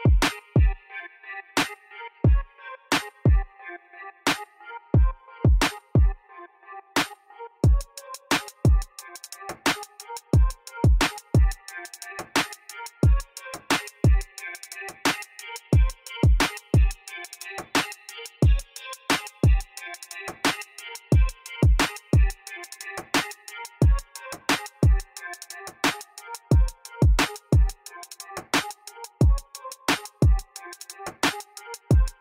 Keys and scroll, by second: 0.1 3, 2.2 3, 2.4 Return, 3.5 Tab, 5.8 Tab, 6.2 2, 7.0 shift+s, 7.3 Tab, 11.8 g, 11.9 z, 24.5 g, 24.6 z, 28.4 1, 28.5 ., 28.5 4, 28.6 Return, 29.6 ctrl+2.